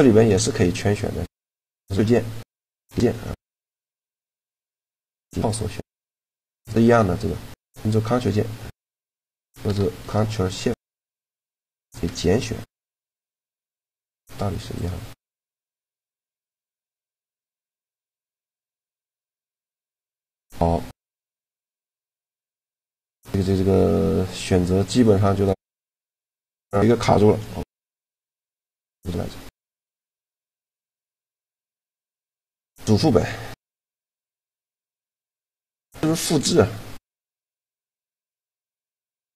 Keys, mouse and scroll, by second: 2.2-4.0 drag, 5.1-7.0 middle drag, 10.3-11.9 drag, 12.0 middle click, 13.4-15.1 middle drag, 13.9 c, 16.4 middle click, 17.2 c, 18.9-20.5 right drag, 19.7 Tab, 21.2-24.4 middle drag, 24.6 middle click, 24.9-26.2 drag, 27.5 shift+g, 29.8 shift+l, 37.7 right click, 38.7-39.3 drag.